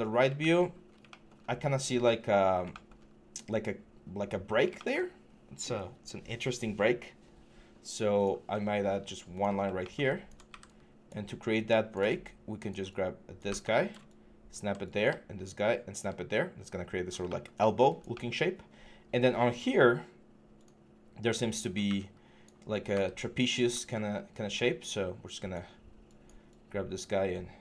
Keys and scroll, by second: 1.6 4, 10.3 w, 13.2-14.4 typing, 15.4 scroll down 16, 15.6 v, 22.7-23.3 typing.